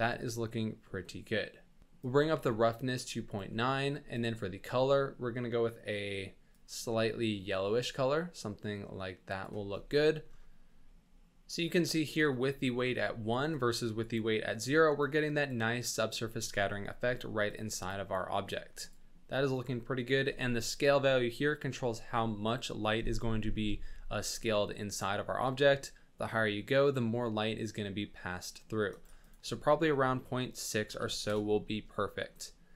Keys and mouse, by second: 2.0-3.4 ctrl+drag, 4.1 click, 10.1 drag, 13.5 click, 15.0 click, 17.5 click, 18.6 click, 25.4-28.9 shift+drag, 29.3-31.2 drag.